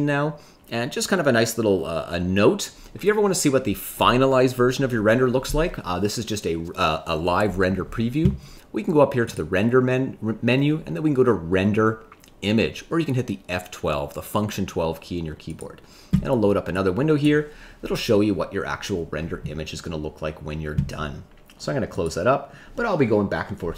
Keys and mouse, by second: 9.4-16.0 drag.